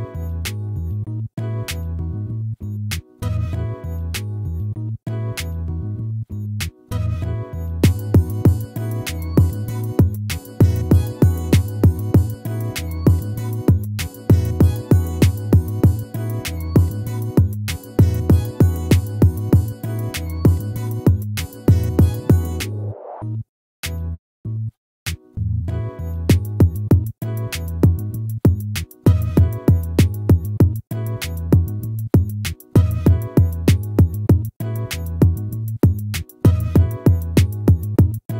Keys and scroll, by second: 19.9 ctrl+-, 23.3 ctrl++, 25.5 ctrl++.